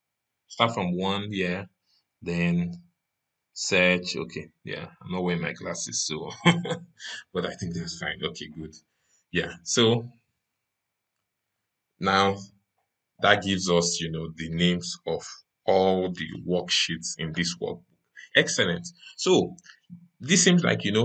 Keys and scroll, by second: 10.8 ctrl+shift+Down.